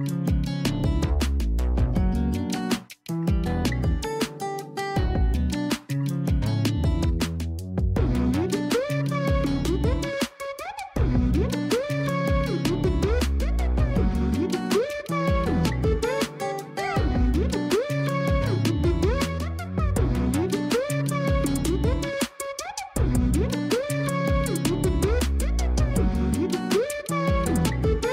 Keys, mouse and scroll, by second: 0.0-0.4 scroll down 2, 0.4-0.9 shift+middle drag, 0.9-1.3 scroll up 4, 2.0-2.5 scroll up 2, 2.5-4.0 scroll down 2, 4.0 click, 4.7-5.4 scroll down 2, 5.4 s, 11.4-11.8 scroll up 5, 12.2 g, 14.3-14.8 scroll down 7, 14.8 a, 15.0 a, 15.4 click, 16.2-16.8 drag, 16.8-17.4 scroll up 7, 17.4 a, 17.6 a, 19.9-21.2 scroll down 7, 21.2-21.7 scroll up 1, 21.7 g, 23.1 r, 24.5-24.9 scroll up 1, 24.9 s, 26.5 g, 28.0-28.1 scroll up 2.